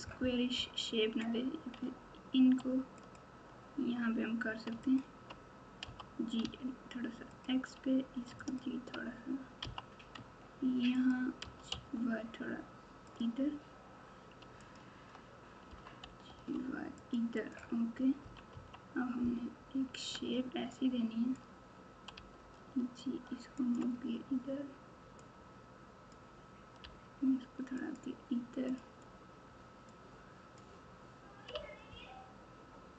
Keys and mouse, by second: 3.0 alt+click, 5.8 g, 8.3 alt+click, 9.6 g, 11.4 g, 14.6 alt+click, 15.6 g, 17.4 click, 18.2 KP_1, 18.5 KP_3, 20.1 alt+z, 20.8 click, 22.1 g, 25.5 click, 26.8 g, 29.8 click, 30.1 click, 31.5 g.